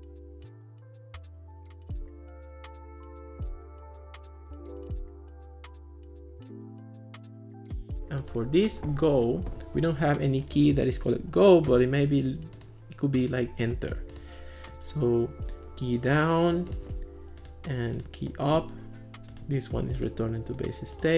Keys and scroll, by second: 0.0-3.0 typing, 4.3 Return, 4.5-8.1 typing, 4.6 Return, 8.1 Return.